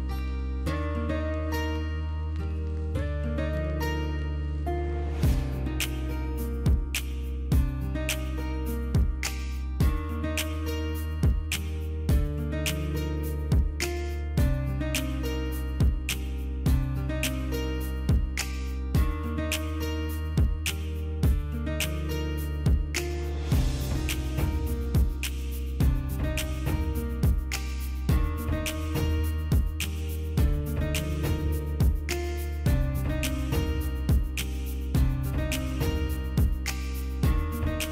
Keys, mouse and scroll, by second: 16.5 click, 20.8 Delete, 23.9 ctrl+d, 27.7 double click, 29.4 double click, 30.9 double click.